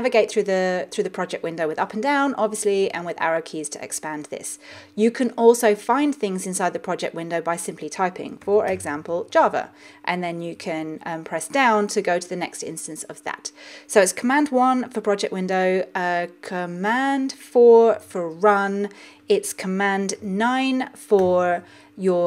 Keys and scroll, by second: 2.2 Up, 3.0 Down, 3.3 Right, 18.0 super+4, 21.2 super+9.